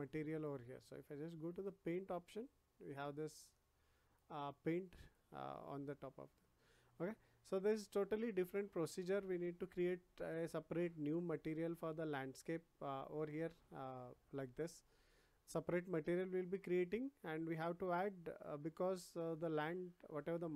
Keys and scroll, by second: 7.5 ctrl+z.